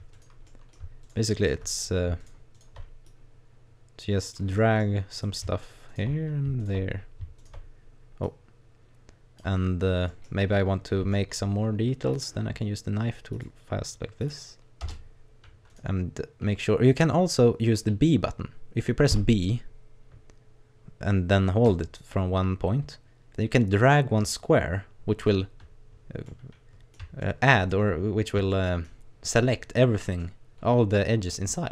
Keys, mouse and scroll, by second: 0.1 right click, 0.5 middle click, 1.0 shift+right click, 1.4 right click, 2.2 right click, 2.5 right click, 3.1 click, 4.6 middle click, 5.2 right click, 5.6 shift+right click, 5.9 shift+right click, 6.6 right click, 6.9-7.4 scroll down 1, 7.4 shift+right click, 8.3 click, 9.7-10.1 scroll down 1, 10.1 middle click, 11.1 shift+middle click, 12.1 click, 15.7 right click, 19.1 b, 26.2 middle click, 27.2 shift+middle click, 27.9-28.5 scroll up 3, 28.5 shift+middle click, 30.2 middle click.